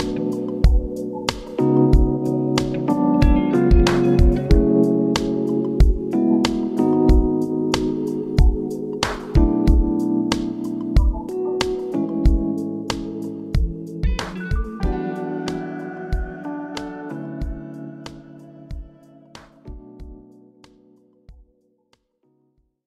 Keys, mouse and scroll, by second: 1.5 KP_1, 2.0-3.2 scroll up 7, 3.2-5.4 shift+middle drag, 5.4-7.6 drag, 8.8 KP_0, 10.7-11.2 middle drag, 11.2-12.0 scroll down 8, 12.0-12.9 middle drag, 12.9-14.8 scroll down 26, 14.8-15.4 middle drag, 15.4-16.2 scroll down 6, 16.2-18.4 middle drag, 18.6-20.9 middle drag, 20.9 click, 21.1-21.6 scroll down 1, 21.6 g.